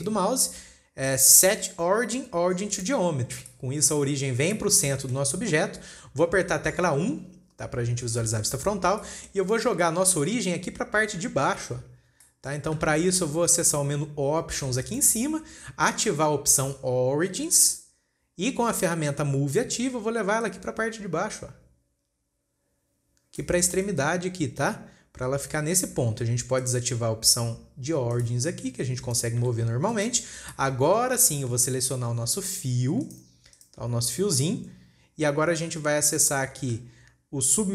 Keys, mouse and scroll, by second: 0.3-3.9 right drag, 3.9-4.5 middle drag, 4.5-5.0 scroll up 3, 5.0-8.6 shift+middle drag, 8.6 KP_1, 9.3 scroll up 1, 9.4-9.9 shift+middle drag, 9.9-10.4 scroll up 8, 11.0-11.3 scroll up 2, 12.4-12.7 scroll down 1, 12.7-15.3 shift+middle drag, 15.3-18.5 drag, 20.9 click, 24.1-24.4 shift+middle drag, 24.4 scroll up 1, 25.7-26.3 scroll down 11, 27.0-28.9 drag, 28.9 scroll down 4, 29.8 g, 30.7 scroll down 2, 31.0 shift+middle click, 31.3-32.1 scroll up 12, 32.1-33.5 shift+middle drag, 33.5 click, 34.0 click, 34.7-35.2 scroll down 5, 36.3-36.9 scroll down 10.